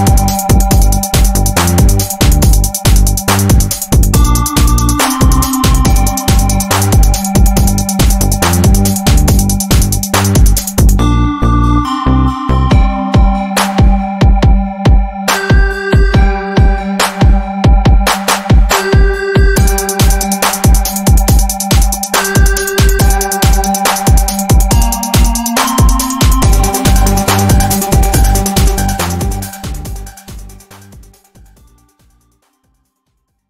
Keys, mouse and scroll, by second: 0.7 shift+click, 2.8 ctrl+alt+u, 3.9 ctrl+scroll up 1, 4.3 click, 4.3 click, 4.8 ctrl+scroll up 1, 6.1 e, 6.6 click, 7.9 v, 8.4-13.1 drag, 13.2 ctrl+scroll down 1, 13.9 click, 14.6 ctrl+scroll up 1, 15.1-17.0 drag, 17.0 ctrl+g, 18.5 click, 19.1-20.0 typing, 20.7-23.9 drag, 24.5 ctrl+s, 27.1 click, 28.5-31.1 typing, 32.1 click.